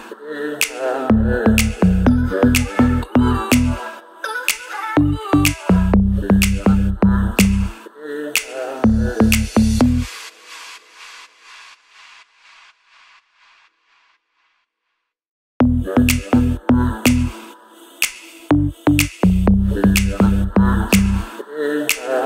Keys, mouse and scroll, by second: 1.1 click, 2.1-4.3 alt+drag, 4.7-5.0 scroll down 1, 5.0 click, 6.9 ctrl+l, 8.5-12.8 drag, 14.1 click, 14.1-14.9 scroll up 2, 14.1 click, 18.2 shift+click, 20.6 ctrl+j, 22.1 click.